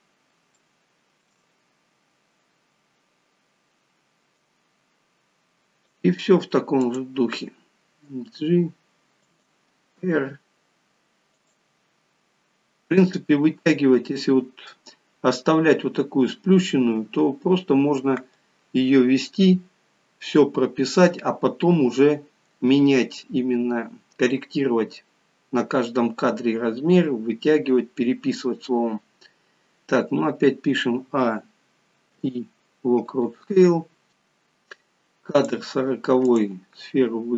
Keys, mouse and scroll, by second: 0.5 shift+middle click, 1.5-1.9 scroll up 2, 1.9 scroll down 1, 4.3 click, 6.7 click, 8.0 g, 10.0 r, 31.1-33.1 a, 34.1 click, 36.2 click.